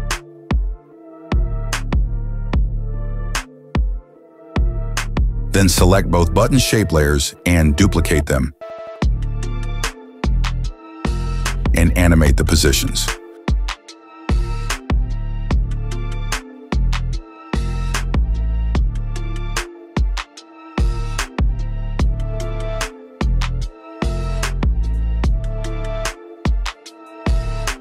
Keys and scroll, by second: 0.9 space, 2.3 space, 7.9 ctrl+d, 12.2 p, 20.9 space.